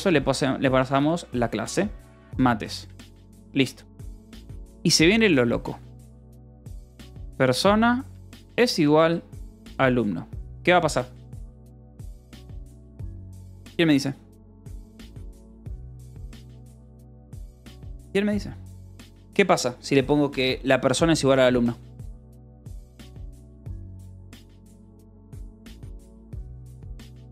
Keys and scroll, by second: 0.8-3.8 typing, 3.6 ctrl+s, 4.1 Return, 6.4-10.6 typing.